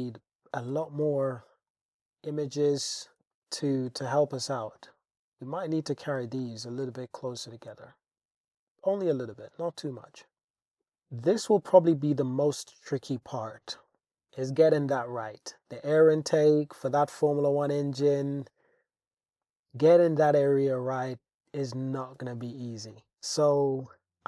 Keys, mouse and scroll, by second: 0.7 g, 1.0 z, 3.2 alt+z, 3.3 Tab, 3.9 Tab, 4.5 alt+z, 4.8 click, 6.2 g, 6.4 y, 7.5 click, 7.7 Tab, 12.3 click, 12.7 click, 13.2 click, 13.8 click, 14.1 shift+scroll, 14.2 Tab, 19.4-20.5 middle drag, 21.2-21.6 middle drag, 22.0 middle drag, 22.9 middle click, 23.5 shift+middle click.